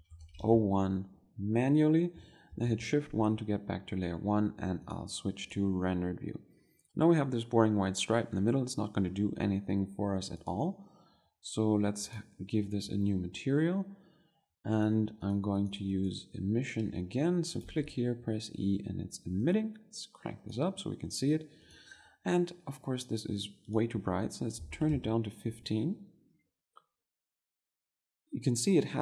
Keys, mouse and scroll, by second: 3.5 shift+1, 6.5-18.7 drag, 20.5-27.7 drag, 27.7-29.0 middle drag.